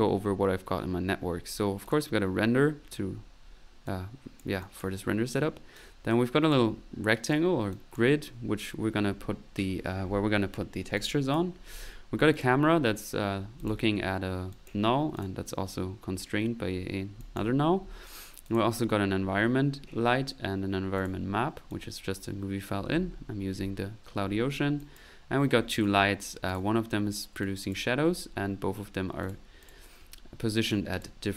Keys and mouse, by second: 1.8 click, 3.8-5.2 drag, 5.7-6.7 drag, 7.2-8.3 drag, 11.0 click, 12.3 click, 13.3 middle click, 13.6 click, 14.5 click, 15.0 click, 16.7 middle click, 17.2 click, 17.5 middle click, 18.4 click, 21.0 click, 21.7 click, 22.9 middle click, 24.8 click, 25.4 right click, 26.0 right click, 26.5 click, 27.4 click, 28.3 middle click, 29.2 click, 29.6 click, 30.7 click.